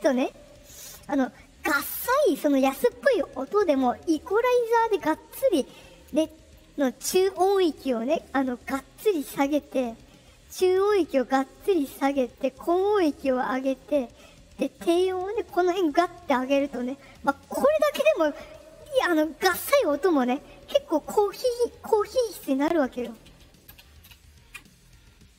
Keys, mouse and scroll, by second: 9.4 click, 10.6 click, 11.3 click, 12.0 click, 12.7 click, 14.6-16.2 drag, 25.3 click.